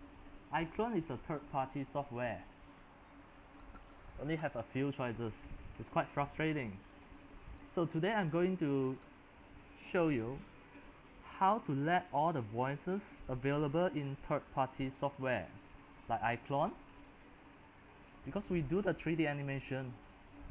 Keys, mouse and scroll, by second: 6.8-20.5 drag.